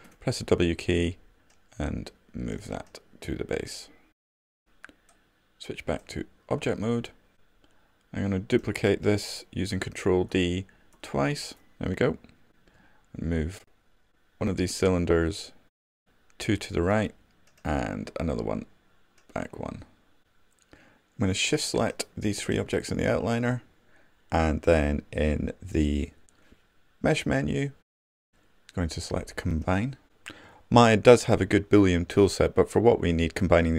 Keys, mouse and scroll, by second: 0.7 w, 5.3-8.3 drag, 10.1 ctrl+d, 22.2 shift+click.